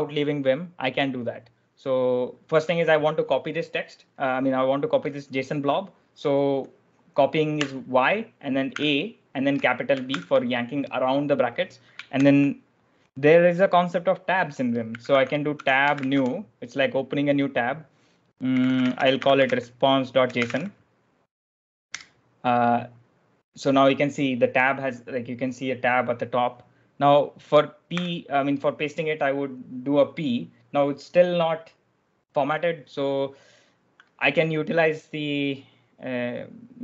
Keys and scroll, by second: 7.5 y, 8.6 a, 10.0 shift+b, 12.1 shift+;, 14.5-16.6 typing, 18.1-22.3 typing, 27.8 p, 30.8 typing.